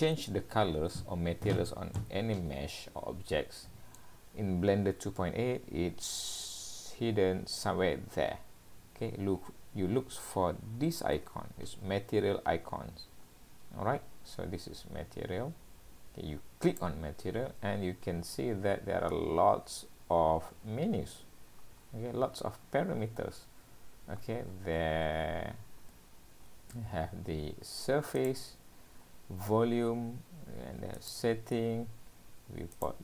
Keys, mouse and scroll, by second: 2.0 middle click, 26.9 scroll down 1.